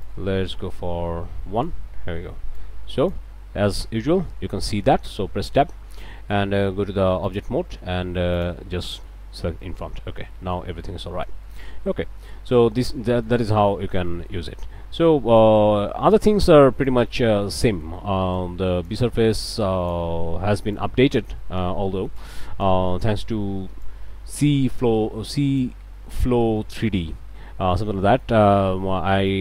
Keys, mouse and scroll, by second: 0.0-1.8 drag, 2.5 click, 3.6 middle click, 5.1 Tab, 7.3 click, 8.4 click, 8.9 click, 9.4 Tab, 9.6 click, 10.0 scroll up 1, 10.3 click, 10.7 a, 11.0 scroll up 1, 11.2 click, 11.7 middle click, 12.0 scroll down 1, 12.3 middle click, 13.1 middle click, 13.7 a, 14.1 middle click, 14.3 click, 15.4 click, 16.9 click, 18.3 click, 19.5 click, 20.7 click, 21.4 middle click, 22.2 click, 22.9 middle click, 23.8 click, 25.9 click, 26.9-27.9 drag, 28.1 click.